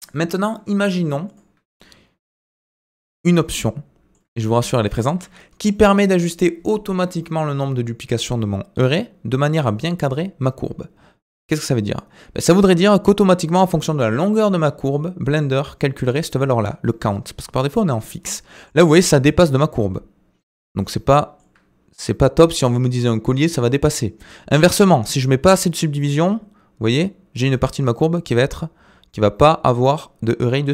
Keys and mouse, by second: 0.2 Tab, 0.5-0.9 middle drag, 2.8 middle click, 3.5-4.2 middle drag, 4.4-5.1 shift+drag, 6.1 middle click, 12.9-13.6 shift+middle drag, 18.3 middle click, 20.8-21.4 middle drag, 25.2-26.9 drag.